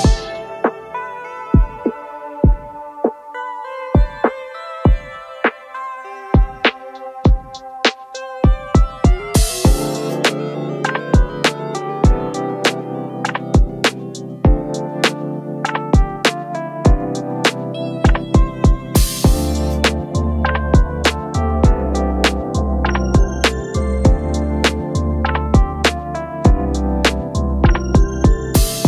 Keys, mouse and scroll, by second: 3.5 alt+click, 7.3 double click, 22.2 shift+click.